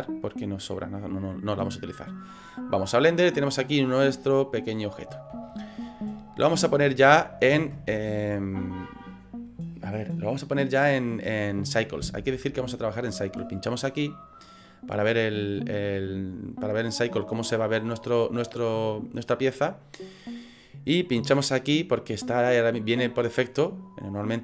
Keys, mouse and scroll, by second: 3.1 middle click, 5.5 shift+middle click, 14.0 click, 21.5 click.